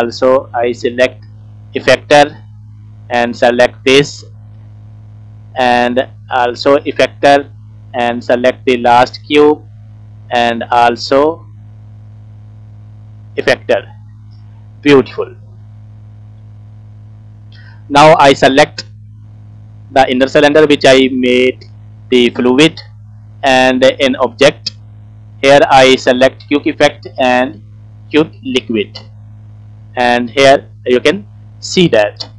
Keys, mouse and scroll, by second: 2.7 click, 3.8 click, 4.9 click, 5.7 click, 7.8 click, 9.5 click, 10.5 click, 11.9-16.4 drag, 16.9 middle click, 17.8 shift+middle click, 18.4 scroll up 2, 19.2 click, 19.8 scroll down 1, 19.9 middle click, 21.1 shift+scroll down 2, 21.4 shift+middle click, 21.9 scroll down 2, 22.1 middle click, 22.9 scroll up 2, 23.4-23.8 scroll down 1, 24.3-29.0 drag, 29.8 middle click, 30.7-31.1 scroll up 1, 31.1 scroll down 1, 31.2 scroll down 1, 31.3 middle click.